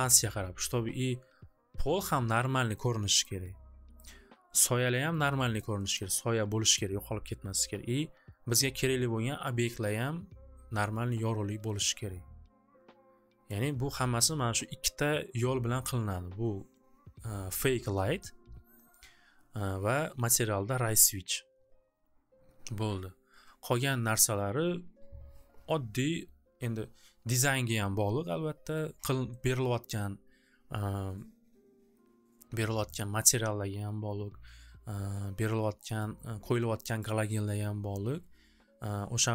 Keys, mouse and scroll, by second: 2.1 click, 3.3 click, 4.1 click, 5.1 click, 5.7 click, 6.1 click, 6.9 click, 13.6-18.6 drag, 29.5-33.7 drag, 37.1 click.